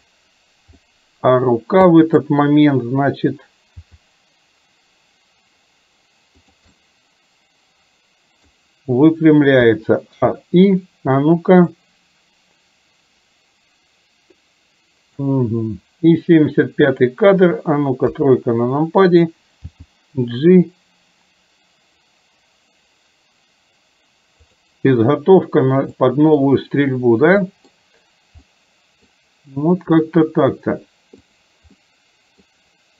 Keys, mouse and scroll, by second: 0.8 middle click, 2.1 middle click, 3.9 g, 6.8-8.6 middle drag, 9.7 a, 10.2 i, 11.8-15.3 drag, 17.1 click, 18.2 KP_3, 19.8 g, 25.9-26.4 middle drag, 25.9 scroll up 1, 27.6 middle click, 27.6 scroll up 1, 27.8 scroll down 1, 28.6 middle click, 28.6 scroll up 1, 31.8 middle click.